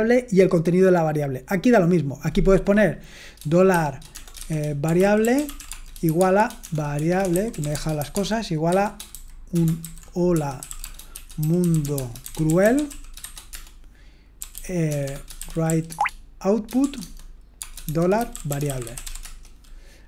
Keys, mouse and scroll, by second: 4.2-19.7 typing, 18.6 Return.